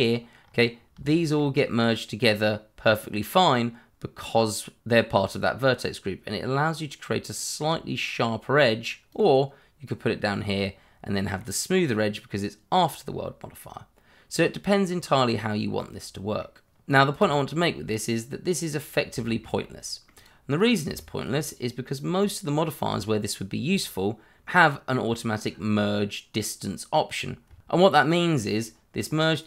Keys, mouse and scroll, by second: 0.4 scroll up 1, 1.0 shift+middle click, 1.9 middle click, 4.9 scroll up 1, 5.4 scroll down 1, 5.8 middle click, 9.1 click, 10.5 scroll down 1, 11.1 middle click, 17.7 click, 18.9 middle click, 19.7 shift+middle click, 20.3 click, 20.6-20.9 scroll up 1, 20.9 shift+middle click, 22.2 click, 24.4 middle click, 27.8 middle click, 29.3 click.